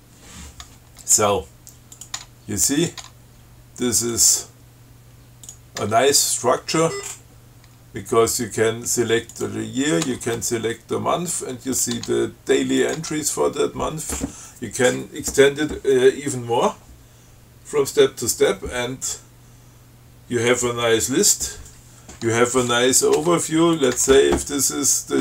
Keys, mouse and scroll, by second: 2.2 click, 2.4 Tab, 3.0 click, 3.3 Tab, 4.3 click, 5.7 click, 6.0 Tab, 7.1 scroll up 1, 7.9 Tab, 9.5 click, 10.3 Tab, 12.0 click, 12.2 Tab, 13.0 click, 13.3 Tab, 23.2 click, 23.4 Tab, 24.0 click, 24.2 Tab.